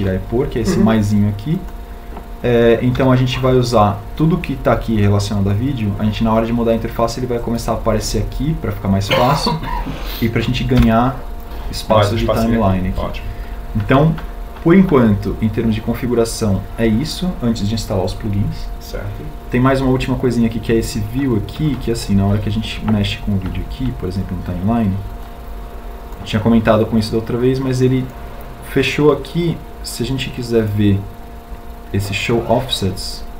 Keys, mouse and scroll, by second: 3.4 n, 11.3 n.